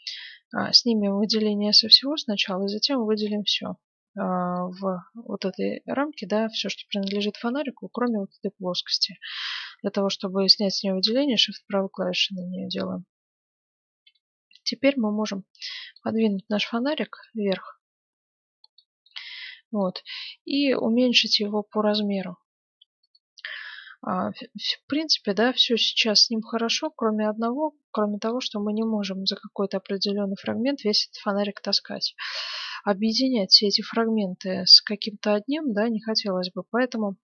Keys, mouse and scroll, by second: 3.1 b, 7.9-9.7 right drag, 12.3-14.8 middle drag, 14.8-16.5 drag, 16.2-17.9 middle drag, 17.2-18.9 drag, 19.1-21.0 middle drag, 20.4 s, 23.5-24.7 middle drag, 28.2-30.1 middle drag, 30.2 middle click, 31.5-34.4 middle drag, 36.0-37.2 middle drag.